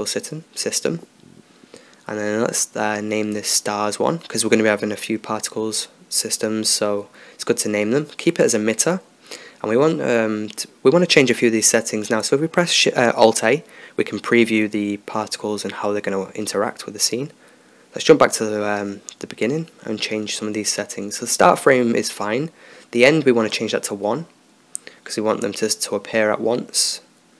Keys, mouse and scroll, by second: 2.7 BackSpace, 6.4-13.7 drag, 13.7 alt+a, 16.6-18.1 drag, 17.5 ctrl+s, 19.0 click, 19.3 ctrl+s, 19.4-24.8 drag, 26.9-27.3 drag.